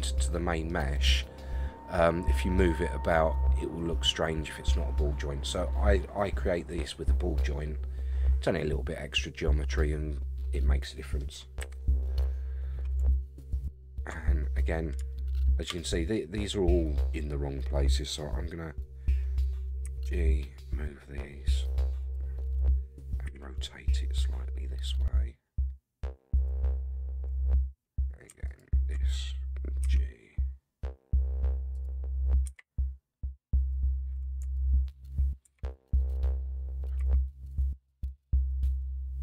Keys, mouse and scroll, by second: 0.2 middle click, 5.0-11.2 middle drag, 11.6 KP_1, 12.3-13.0 scroll up 5, 13.5 alt+click, 15.1 shift+middle click, 19.8 g, 23.3 r, 28.4 alt+click, 29.8 g, 32.4 r, 34.5 alt+click, 35.4 r, 37.0 g.